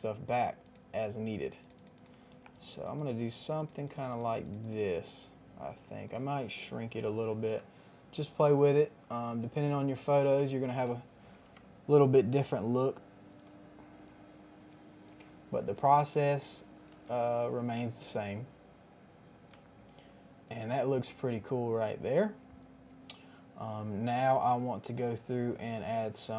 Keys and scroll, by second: 7.4 ctrl+t, 10.7 KP_Add, 11.2 Return.